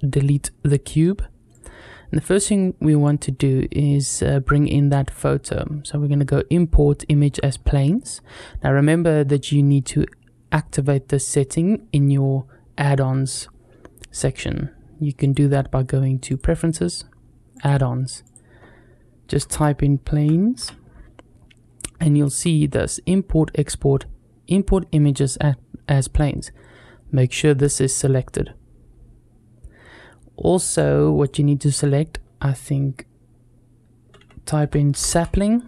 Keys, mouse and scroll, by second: 1.3 click, 2.9-14.2 drag, 15.0-16.4 drag.